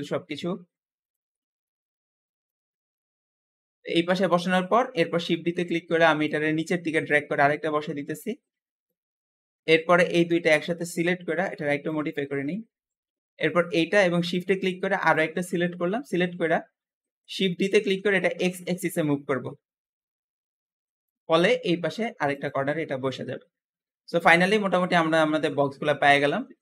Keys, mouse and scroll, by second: 1.2-2.3 middle drag, 2.3 click, 3.6 KP_7, 4.3-4.6 scroll down 4, 4.6 shift+middle click, 5.0-5.4 scroll up 1, 5.4 shift+middle click, 5.7 shift+d, 6.9 click, 9.0-9.7 scroll up 2, 10.3-11.7 shift+middle drag, 11.7 click, 13.0-13.3 scroll down 2, 13.3 middle click, 14.2-14.8 scroll up 2, 14.8 shift+click, 15.7 KP_7, 16.4-16.8 scroll down 3, 16.8 shift+middle click, 17.3 shift+d, 21.3 middle click, 22.2 click, 22.6 middle click, 23.1-23.9 scroll down 10, 23.9 middle click, 24.4-26.6 scroll up 10.